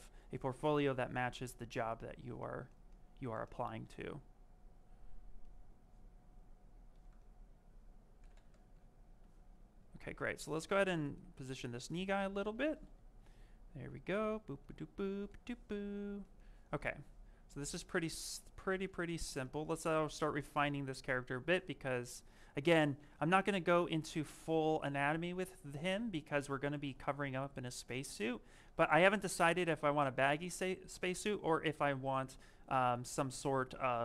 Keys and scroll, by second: 8.2 m, 8.6 s, 20.9 s, 33.3 s.